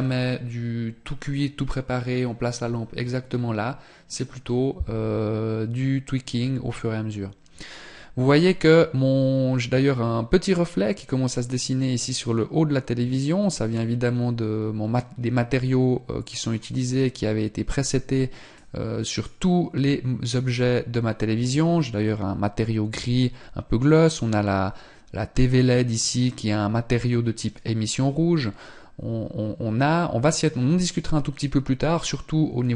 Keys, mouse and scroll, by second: 18.4 click, 25.9 click.